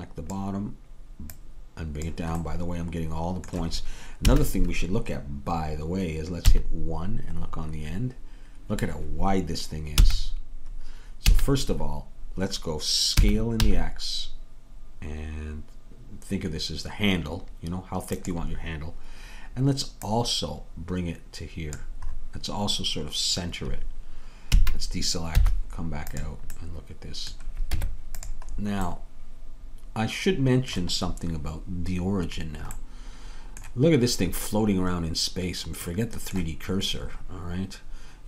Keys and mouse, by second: 2.5-3.6 middle drag, 4.3 a, 6.5 KP_1, 10.1 s, 13.2 s, 20.1-21.9 drag, 22.2-24.5 middle drag, 24.5 a, 25.4 z, 27.8 Tab, 31.2 middle click.